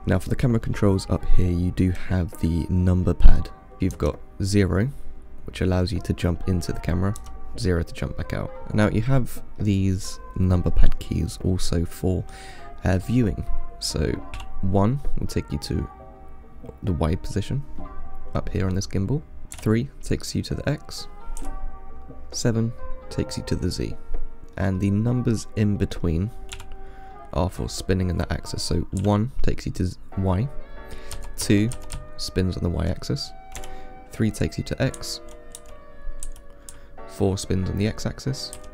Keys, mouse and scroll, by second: 3.8 KP_1, 4.2 KP_0, 7.4 KP_0, 8.6 KP_1, 9.3-12.5 middle drag, 14.6 KP_1, 19.8 KP_3, 24.4-26.8 middle drag, 26.8 KP_1, 29.2 KP_1, 31.4-33.8 typing, 35.2 KP_4, 35.8 KP_4, 36.9-38.1 KP_4.